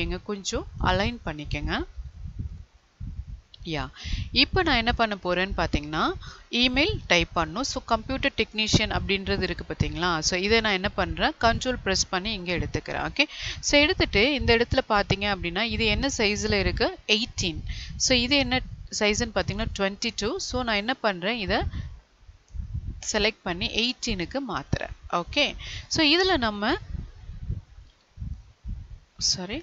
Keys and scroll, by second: 1.7 Down.